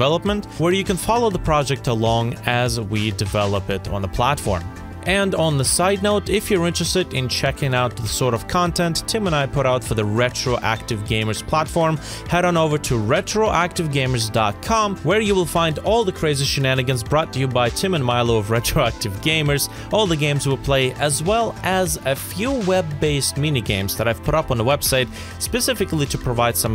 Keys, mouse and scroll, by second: 2.0 middle click, 2.5 scroll down 1, 2.7 scroll up 1, 2.9 middle click, 7.0 right click, 8.8-10.9 typing, 11.8 right click, 13.1-13.8 typing.